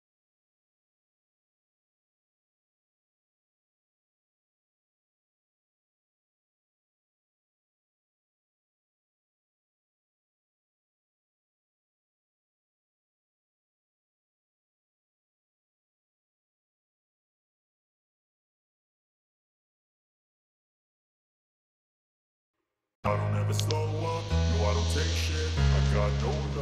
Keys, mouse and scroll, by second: 18.9 click, 19.7 click, 20.1 click, 20.8-22.2 drag, 23.7-24.8 drag.